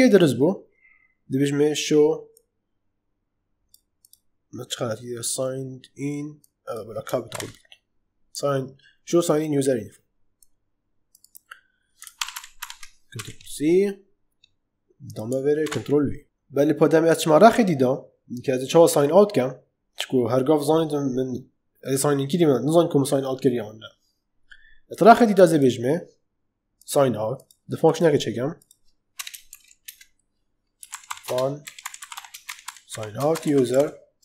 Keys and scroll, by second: 7.2 shift+u, 12.1 ctrl+shift+Left, 13.1 ctrl+c, 15.5 ctrl+v, 29.1 Return, 29.4 Up, 29.8 Return, 30.5-34.2 typing.